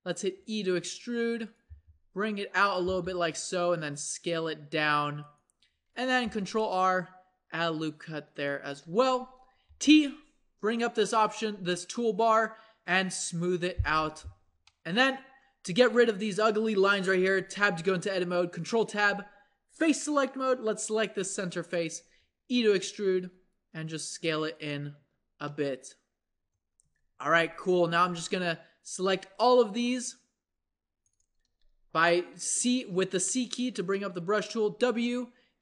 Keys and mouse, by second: 0.4 e, 1.7 g, 2.8 r, 4.9 s, 5.7 a, 6.2 ctrl+r, 8.6 Tab, 9.6 t, 14.0 click, 14.0 t, 17.2 middle click, 17.4 Tab, 18.5 ctrl+Tab, 22.0 e, 23.1 s, 25.0 Tab, 26.8 Tab, 27.3 a, 27.9 z, 29.1 c, 31.4 z, 34.6 w.